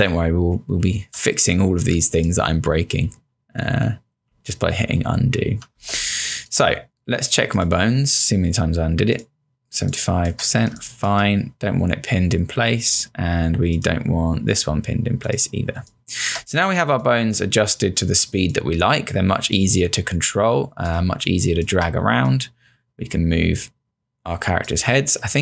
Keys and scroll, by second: 0.8-1.7 typing, 2.9 ctrl+z, 5.7 ctrl+z, 5.9 space, 9.8 space, 15.9 space, 21.0 space.